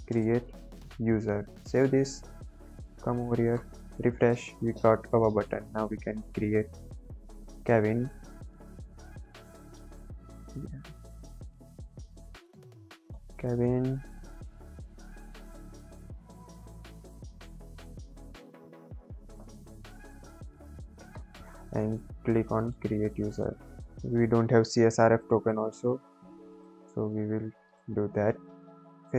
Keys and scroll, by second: 0.0-1.3 typing.